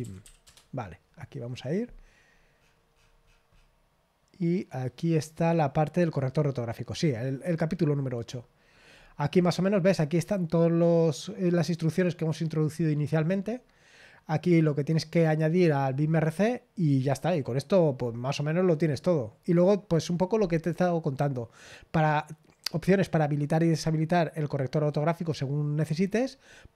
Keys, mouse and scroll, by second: 0.0-0.7 typing, 2.0-6.0 scroll down 1, 6.0 click, 8.3-9.9 scroll down 3, 9.9-13.4 scroll up 1, 13.4-15.8 scroll down 2, 15.8-16.9 scroll down 1, 16.9-17.9 scroll down 1, 17.9-20.7 scroll down 1, 20.7-25.9 scroll down 1, 25.9-26.7 scroll down 1.